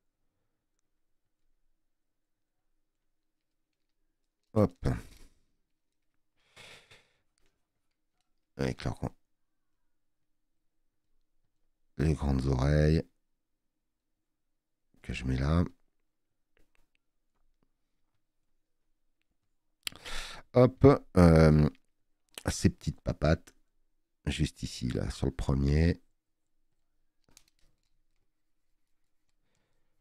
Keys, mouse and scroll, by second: 19.5 space.